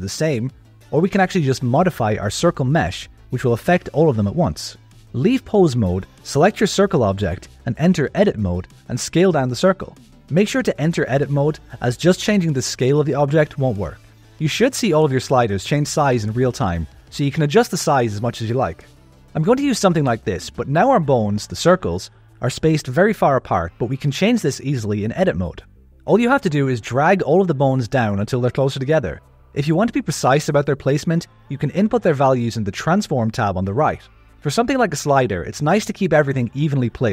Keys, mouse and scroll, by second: 1.5 click, 2.8-4.9 drag, 6.3 middle click, 7.4 click, 8.4 Tab, 9.0 a, 9.6 Tab, 10.1 s, 13.8 Tab, 14.6 s, 22.1 KP_1, 24.3 Tab, 25.8 click, 26.7 click, 26.9 g, 27.8 click, 28.0 click, 28.1 g, 29.0 click, 29.1 g, 30.2 click, 31.6 click, 32.1 click, 32.8 click, 33.8 click, 34.4 click, 34.8 click, 35.5 click, 36.1 click, 36.6 click.